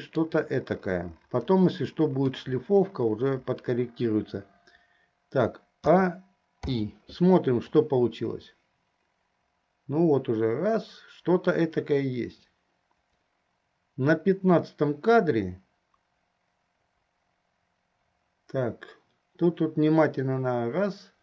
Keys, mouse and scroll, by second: 2.3 KP_3, 6.0 a, 6.9 i, 8.0-21.2 drag.